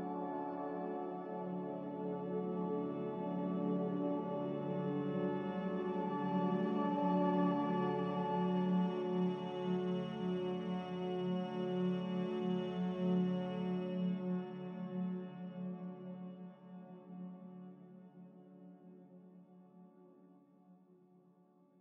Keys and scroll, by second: 4.9-5.8 typing, 5.9 Return, 19.2-21.1 typing.